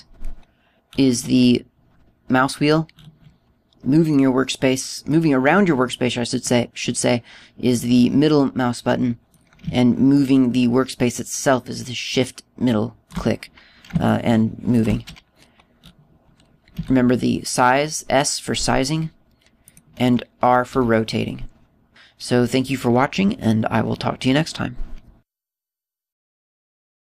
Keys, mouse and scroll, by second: 0.8-1.7 scroll down 5, 2.0-2.5 scroll up 8, 2.8-3.5 scroll down 6, 3.4 scroll up 2, 3.7-4.0 scroll down 3, 4.0 scroll up 1, 4.3 scroll down 1, 4.3-4.7 scroll down 2, 5.2 middle click, 6.2 scroll down 1, 6.8-7.1 scroll down 4, 7.5 middle click, 10.7 scroll down 1, 11.3 shift+middle click, 15.2 shift+middle click, 16.9 scroll up 4, 17.9 s, 20.9 click, 21.8 r, 22.9 middle click, 22.9-23.3 scroll down 3, 24.3 scroll down 2, 24.9-26.0 scroll up 7, 26.0 shift+middle click.